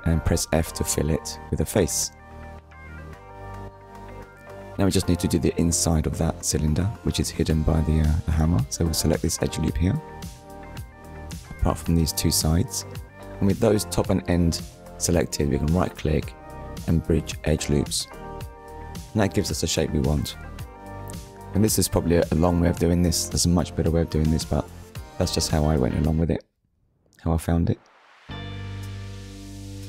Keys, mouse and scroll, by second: 0.4 shift+click, 1.3 shift+click, 3.2 middle click, 4.7 Tab, 6.5 middle click, 7.3 Tab, 9.2 alt+click, 10.5 shift+click, 11.3 shift+click, 11.9 middle click, 14.3 right click, 16.5 click, 18.3 Tab, 19.2 middle click, 23.8 click, 24.3 scroll down 1, 24.7 middle click, 25.8-26.1 scroll down 2, 26.1 shift+middle click, 27.3 ctrl+s, 29.6 middle click.